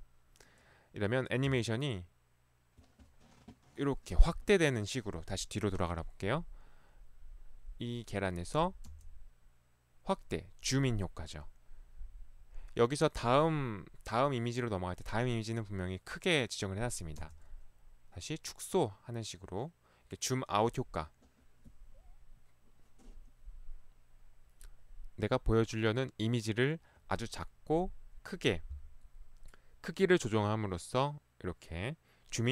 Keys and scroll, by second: 1.5 Right, 4.1 Left, 8.9 Right, 17.3 Right.